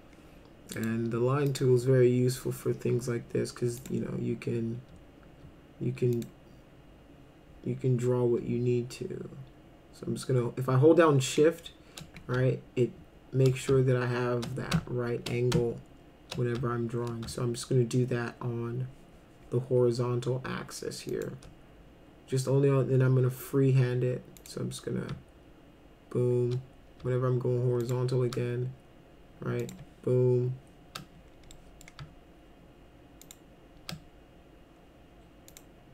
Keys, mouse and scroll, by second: 0.8 click, 1.5 click, 3.8 click, 6.1 click, 21.1 shift+click, 24.4 click, 27.8 shift+click, 29.6 click, 31.6 middle drag, 33.2 shift+click, 35.5 click.